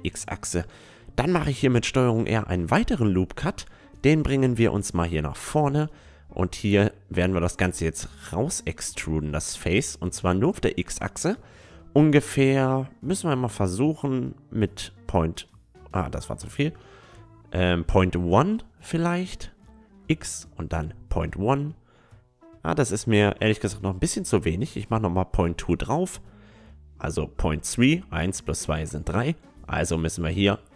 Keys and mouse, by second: 0.5 a, 1.0 ctrl+r, 4.5-11.5 middle drag, 4.8-6.8 drag, 5.5-7.4 right drag, 8.3 e, 17.3 ctrl+z, 18.2 e, 23.4 g, 26.1-27.9 middle drag, 26.7-30.7 right drag, 27.9 e.